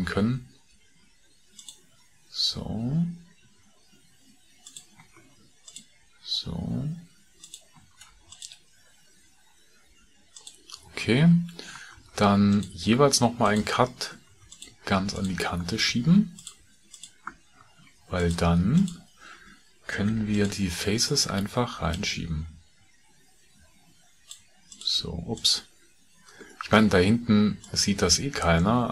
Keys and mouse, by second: 0.1 ctrl+r, 5.2 ctrl+r, 7.9 ctrl+r, 12.0 ctrl+r, 14.2 ctrl+r, 15.8 ctrl+r, 17.5 ctrl+r, 20.0 3, 20.4 click, 20.8 middle click, 22.0 click.